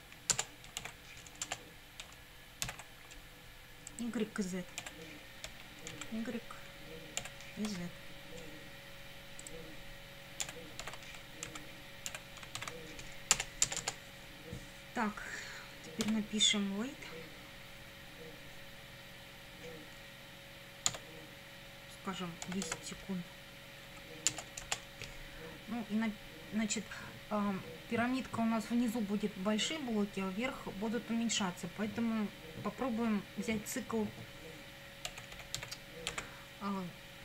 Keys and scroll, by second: 0.3 Return, 0.8 ctrl+v, 1.4 Return, 2.7 ctrl+v, 4.8 BackSpace, 5.5 y, 5.9 Down, 7.2 BackSpace, 7.7 z, 10.4 BackSpace, 10.8 shift+y, 11.5 Down, 12.1 BackSpace, 12.6 shift+z, 13.3 Return, 16.1 w, 20.9 Tab, 22.2-23.2 typing, 23.9 Right, 24.3 Return, 34.8-36.1 typing.